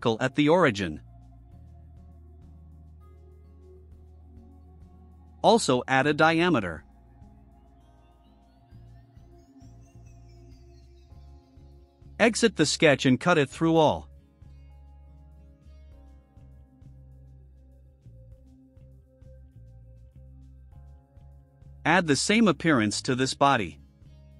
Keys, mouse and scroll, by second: 0.9 click, 2.2 click, 2.8 click, 3.9 right click, 4.8 click, 7.1 click, 7.9 click, 8.9 click, 9.4 1, 9.8 6, 10.2 Return, 11.7 click, 14.4 click, 16.0 click, 16.6 click, 17.7-18.4 drag, 19.0 click, 19.5-20.5 right drag, 22.1-23.4 right drag, 24.2 click.